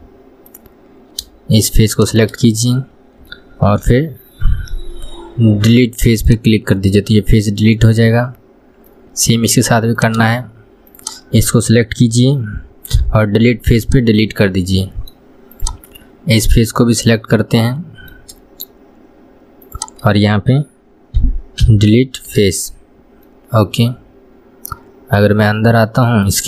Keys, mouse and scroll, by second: 2.2 shift+click, 7.1-8.8 middle drag, 8.8-9.3 scroll up 2, 9.3-10.2 middle drag, 10.2 click, 11.2 shift+click, 14.6-15.9 middle drag, 15.9 click, 16.3-19.3 middle drag, 20.0 shift+click, 23.6-26.4 middle drag.